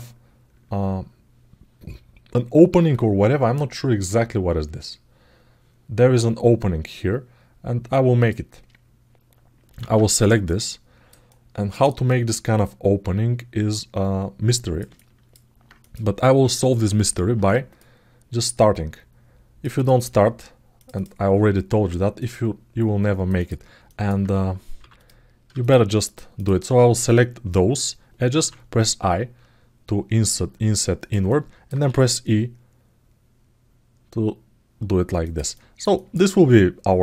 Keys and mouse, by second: 8.0 click, 10.2-11.6 alt+middle drag, 11.8-14.5 alt+middle drag, 14.7 ctrl+alt+middle click, 15.6 click, 20.7 click, 23.6 alt+middle click, 24.7 click, 25.3 shift+click, 26.1 shift+click, 31.0 alt+middle click, 35.3 alt+middle click, 35.7 ctrl+alt+middle click, 36.0 alt+middle click, 36.5 alt+middle click.